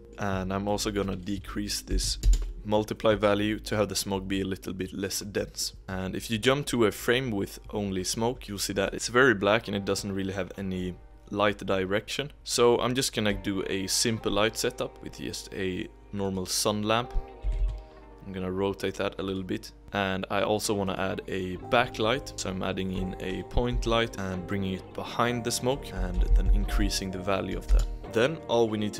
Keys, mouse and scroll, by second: 0.1 middle click, 1.0-2.1 drag, 2.1 0, 3.5 middle click, 4.2-5.4 scroll down 2, 5.4-5.8 scroll down 1, 5.8-8.4 drag, 8.8-10.8 drag, 17.4 r, 20.9 shift+a, 21.7 middle drag, 22.0-22.5 scroll down 4, 22.5-23.7 middle drag, 23.7 g, 24.1 z, 25.8-27.6 drag, 27.6 0.